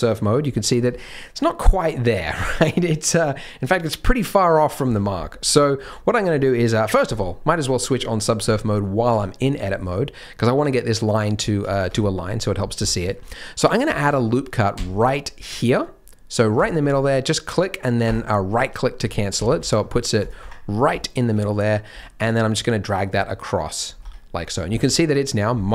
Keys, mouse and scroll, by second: 0.6-1.2 scroll up 6, 1.7-2.4 scroll down 1, 2.4 scroll down 1, 4.8 Tab, 5.1-5.6 scroll up 2, 5.6 shift+middle click, 7.1 click, 7.4-7.9 scroll down 1, 7.9 scroll down 1, 8.4 Tab, 9.1 Tab, 11.6 Tab, 11.9 Tab, 12.8 shift+middle click, 13.1-13.8 scroll up 1, 14.7 ctrl+r, 19.0-19.3 scroll up 2, 19.3 alt+a, 19.5 c, 20.6-21.0 scroll up 2, 21.0 shift+middle click, 21.9 g, 23.1-23.7 scroll down 1, 23.7-24.6 scroll down 5, 24.0 Tab, 24.6 z, 25.0 middle click.